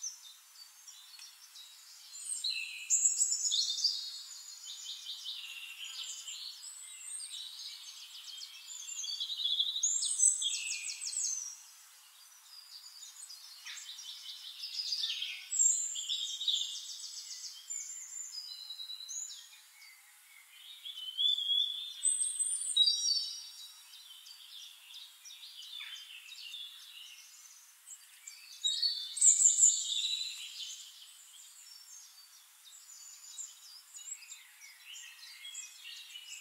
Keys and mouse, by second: 0.6 click, 1.1 click, 1.9 ctrl+d, 2.6 shift+click, 3.3-4.2 drag, 5.0 click, 5.5 click, 5.7 click, 6.3 click, 7.4 click, 8.1-11.6 drag, 12.9 click, 14.0 drag, 14.5 click, 15.3 ctrl+d, 15.8 shift+drag, 16.6-17.4 drag, 17.9 click, 19.0 click, 19.7 click, 20.1 click, 20.6 click, 21.0 click, 22.0 click, 22.9 click, 25.5 ctrl+click, 27.2-28.0 drag, 28.6 click, 29.2-30.6 drag, 31.1-31.9 drag, 32.7 click, 33.1 click, 33.3 click, 33.6 click, 33.8 click, 35.0 drag, 35.5 middle click, 36.2 click.